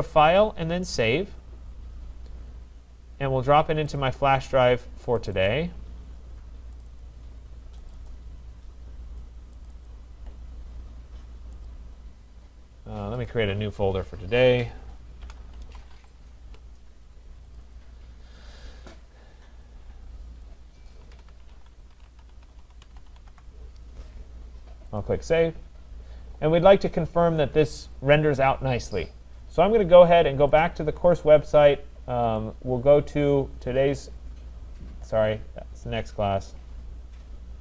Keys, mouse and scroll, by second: 0.0 click, 1.1 click, 4.0 click, 5.3 click, 5.5 click, 6.8 click, 7.0 click, 7.9 click, 8.3 click, 9.7 click, 9.9 click, 11.7 click, 13.3 click, 15.0-16.4 typing, 16.4 Return, 17.5 click, 17.7 click, 18.6 click, 19.7 click, 20.1-23.8 typing, 20.9 click, 25.0 click, 29.3 click, 30.6 click, 32.5 click, 33.2-34.0 scroll, 35.0 scroll.